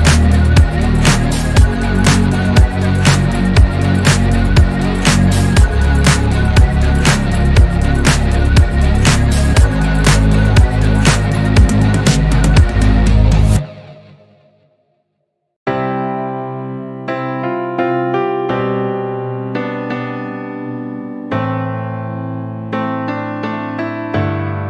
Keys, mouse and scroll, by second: 0.0 alt+z, 0.4 click, 1.6 s, 3.3 Tab, 3.5-4.0 scroll down 3, 4.0-5.2 shift+middle drag, 5.2-5.9 scroll up 4, 5.9 Tab, 6.5 alt+z, 6.7-7.6 scroll down 1, 7.6 Tab, 7.8 click, 8.1-9.0 middle drag, 9.0 KP_3, 10.4-11.0 scroll down 1, 11.0-11.7 shift+middle drag, 11.7 shift+a, 15.0-16.9 drag, 17.4-18.5 middle drag, 18.5-20.4 drag, 23.0-24.6 middle drag.